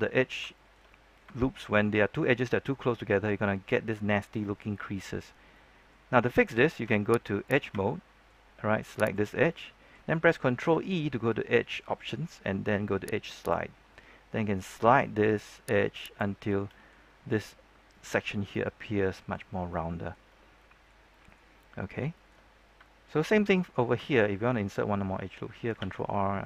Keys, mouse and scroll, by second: 0.5 shift+middle click, 1.3 shift+middle click, 1.9 middle click, 3.0-3.4 scroll up 1, 3.4 middle click, 4.0 shift+middle click, 5.3 scroll down 1, 5.5 middle click, 6.2 shift+middle click, 7.4 ctrl+Tab, 7.4 click, 7.7 shift+middle click, 8.5-9.0 scroll up 1, 9.0 right click, 9.4 middle click, 10.5 ctrl+e, 13.3 click, 16.3 scroll down 1, 16.4 middle click, 18.3 scroll up 1, 18.6 middle click, 19.4 scroll down 1, 19.7 middle click, 20.3 scroll down 1, 20.5 middle click, 22.0 shift+middle click, 22.4-23.9 scroll up 2, 23.9 shift+middle click, 25.7 ctrl+r.